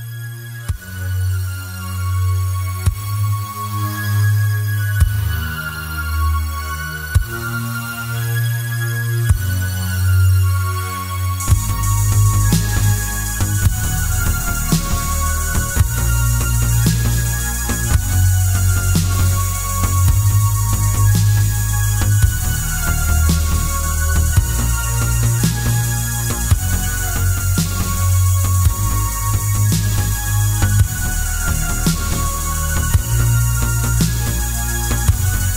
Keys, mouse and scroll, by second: 0.2 click, 0.7 Tab, 1.5 click, 2.2 g, 4.6 click, 5.4 g, 6.4 click, 6.7 Tab, 7.1-10.3 middle drag, 7.7 g, 10.3 click, 10.5-12.1 middle drag, 11.0 shift+z, 12.1 click, 12.4-14.0 middle drag, 13.5-14.0 scroll up 2, 14.0 click, 14.4 g, 16.5 click, 16.8-19.7 middle drag, 17.3-17.6 scroll down 2, 18.3 KP_7, 18.8 shift+z, 19.7 click, 20.1 shift+d, 22.1 click, 22.7 shift+d, 24.7 click, 25.9 s, 27.1 click, 27.4 g, 28.8 click, 29.0 s, 30.4 click, 31.0 g, 32.0 click, 32.3 shift+z, 32.6 click, 32.8-35.1 middle drag, 35.1 click.